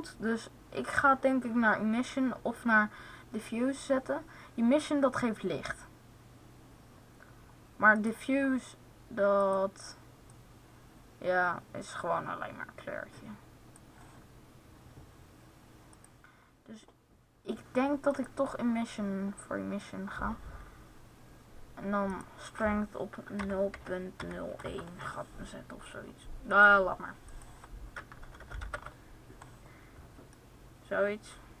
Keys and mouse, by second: 9.2-11.1 drag, 15.7-17.8 drag, 21.9-24.0 drag, 26.3-28.2 drag, 28.2 BackSpace, 29.0 middle click, 30.0 middle click.